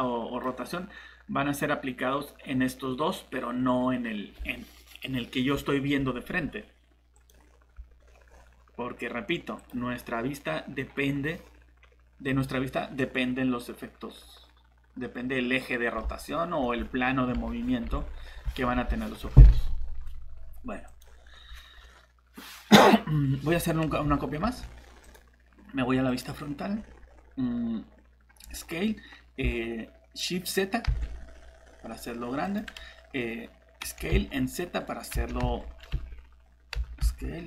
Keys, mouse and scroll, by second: 8.0 scroll down 1, 8.3 scroll up 1, 9.6 click, 16.1 alt+Tab, 17.3 alt+Tab, 21.8 scroll down 1, 24.4 shift+d, 25.0 click, 26.7 scroll up 1, 28.4 s, 29.9-31.0 typing, 32.4 click, 33.8 s, 34.1 z, 35.1 s, 35.4 z, 35.9 Escape, 36.8 s, 37.0 z, 37.1 z.